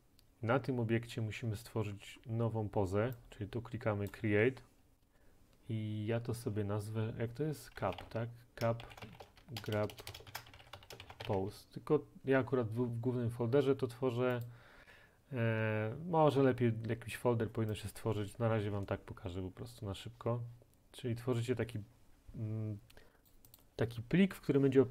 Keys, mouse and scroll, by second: 3.7 scroll down 3, 4.1 click, 7.8-11.4 typing, 14.5-16.3 drag, 23.3 click, 23.6 click.